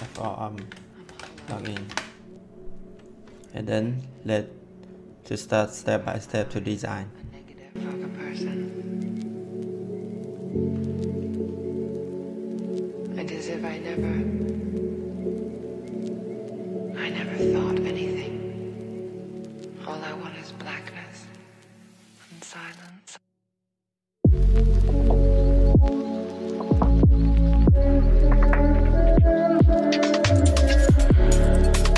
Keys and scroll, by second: 0.0-1.8 typing.